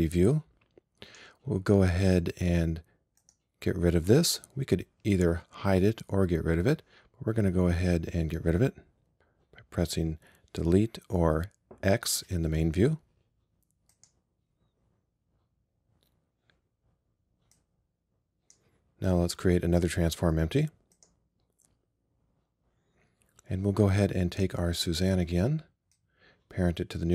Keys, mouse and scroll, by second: 0.9-12.3 drag, 12.3 x, 17.6-20.4 drag, 21.0-22.9 drag.